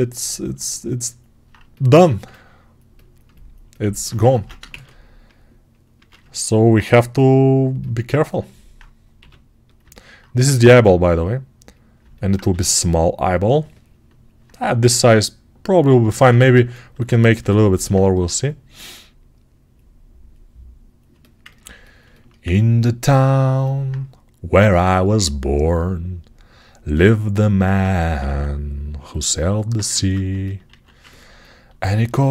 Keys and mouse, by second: 4.1 ctrl+Tab, 4.5 shift+a, 5.8 Tab, 6.8 s, 8.0-15.3 middle drag, 9.0 g, 10.3 s, 12.4 g, 15.3-21.0 right drag, 21.0-26.8 alt+drag, 26.8-29.3 alt+right drag, 28.1 s, 29.8 ctrl+Tab, 30.6 alt+q, 31.9-32.3 ctrl+alt+middle drag.